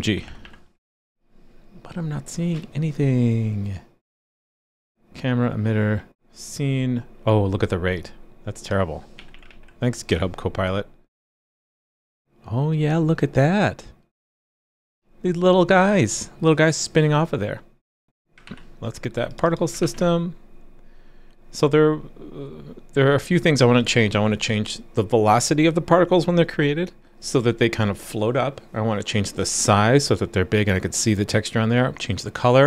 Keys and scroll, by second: 0.9 super+s, 9.5 super+s, 18.4 super+b, 19.8 super+b.